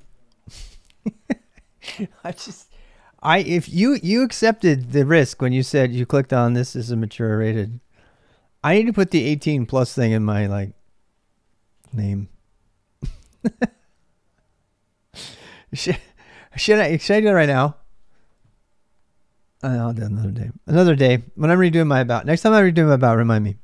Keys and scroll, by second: 0.0-23.6 typing.